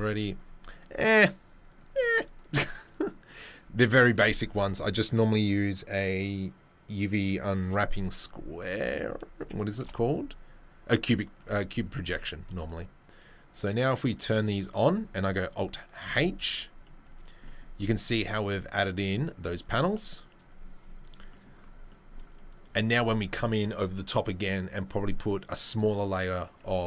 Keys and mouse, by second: 8.7 Tab, 9.4 a, 9.8 u, 11.4 Tab, 13.5-16.6 drag, 16.1 alt+h, 16.6-20.9 middle drag, 20.9 click, 21.0-26.8 middle drag.